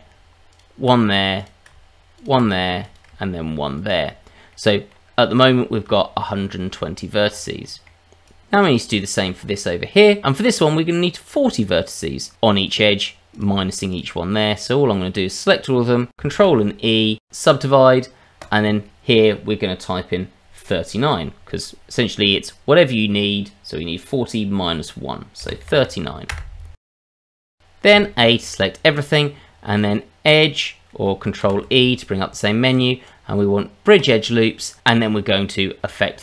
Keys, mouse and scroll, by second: 0.5 ctrl+click, 1.4 click, 2.1 ctrl+click, 2.8 click, 3.7 ctrl+click, 4.5 middle click, 5.1-5.8 scroll down 3, 5.9 shift+middle click, 6.4-6.7 scroll down 1, 6.8 shift+middle click, 7.2-7.6 scroll up 3, 7.6 middle click, 8.2 click, 8.9 shift+middle click, 9.3-10.2 scroll up 2, 12.7 click, 13.4 click, 13.9 click, 14.6 click, 16.4 ctrl+e, 18.4 click, 26.9-27.2 scroll down 3, 27.2 middle click, 27.4 shift+middle click, 27.9 a, 31.4 ctrl+e, 35.8 shift+middle click.